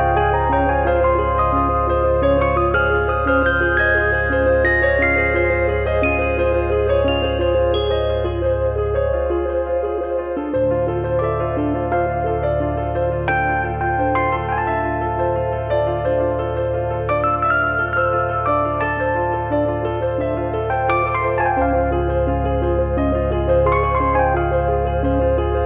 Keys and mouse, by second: 0.2 click, 1.8 middle click, 2.2 middle click, 2.6 click, 4.0 click, 5.8 f, 6.0 middle click, 6.5 KP_7, 6.7 KP_9, 7.1 middle click, 7.4 shift+middle click, 7.9 click, 8.7 click, 9.3 click, 12.7 click, 14.7 click, 15.5 click, 16.0 click, 17.1 click, 17.9 click, 18.8 click, 19.0 click, 19.7 click, 20.6 click, 21.7 click, 22.9 d, 23.7 click.